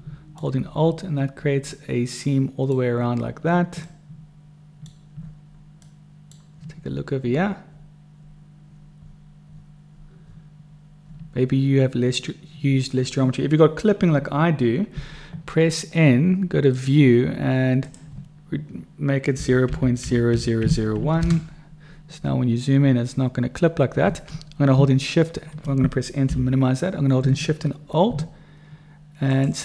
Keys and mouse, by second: 1.7 click, 1.7 right click, 1.9 middle click, 2.7 click, 2.7 right click, 3.9-4.9 middle drag, 5.9-7.1 middle drag, 7.4 middle click, 8.8 middle click, 14.9 n, 16.7 click, 18.0-21.9 drag, 20.2 0, 26.1 n.